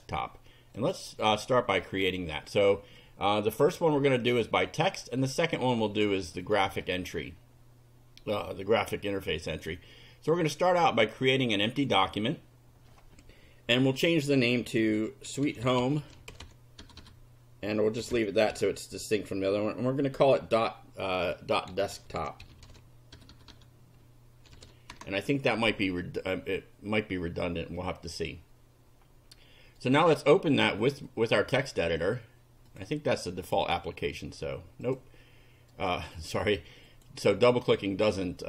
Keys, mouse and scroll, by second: 0.8 click, 1.9 click, 3.0-4.4 drag, 6.4 right click, 11.6 click, 14.6-19.1 typing, 20.2 d, 21.4-23.2 typing, 24.5 o, 25.0 Return, 29.8 right click, 30.8 click, 32.7 click, 33.4 click, 34.8 click, 35.7 right click, 36.9 click.